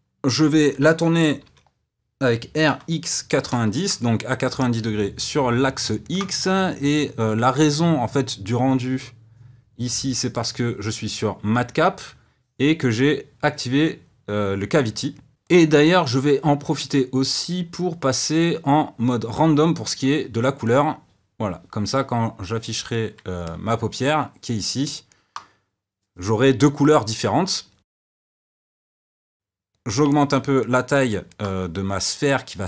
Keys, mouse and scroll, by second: 1.4 r, 4.5-10.3 middle drag, 10.3-13.4 drag, 15.4 click, 17.4-20.5 drag, 22.8 click, 23.4-27.8 middle drag, 27.8 click, 27.9 s, 30.0-32.6 middle drag.